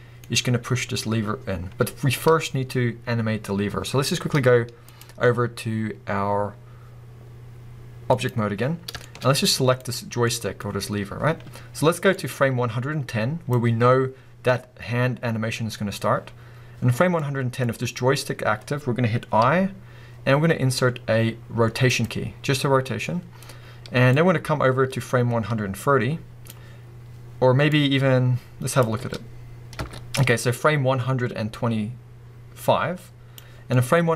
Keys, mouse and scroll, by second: 0.2-4.3 scroll up 2, 4.9-9.0 drag, 8.7 scroll down 1, 9.0-9.8 shift+middle drag, 9.2-9.8 scroll up 1, 9.8 click, 10.2-12.2 middle drag, 12.2-17.2 drag, 17.2-24.2 middle drag, 18.5-19.4 scroll up 2, 24.2-33.7 drag, 26.8-27.7 scroll down 2, 29.0 space, 29.8 space, 33.6 scroll down 2, 33.7-34.1 middle drag.